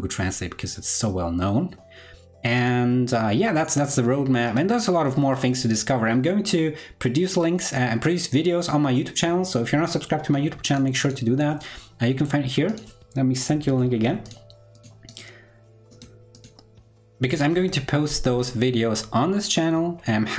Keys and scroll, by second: 13.6 super+c.